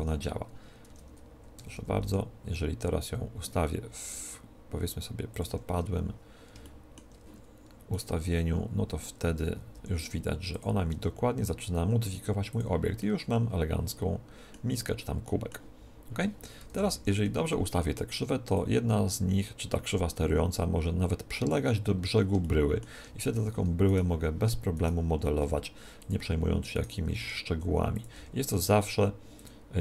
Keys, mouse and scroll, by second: 0.8 Tab, 1.5 a, 1.7 a, 1.9 r, 5.3-7.0 drag, 6.5-8.1 middle drag, 7.8-9.7 right drag, 9.7 r, 10.5-12.4 drag, 10.8 g, 12.5 click, 13.1-14.7 middle drag, 14.9-16.6 middle drag, 16.6 KP_1, 16.9 Tab, 17.1 z, 18.6-20.2 drag, 21.7-23.9 middle drag, 23.1 Tab, 23.8-26.6 right drag, 25.3 w, 26.7-28.5 right drag, 27.1 r, 27.9-29.8 drag, 28.1 g, 29.7-29.8 right drag.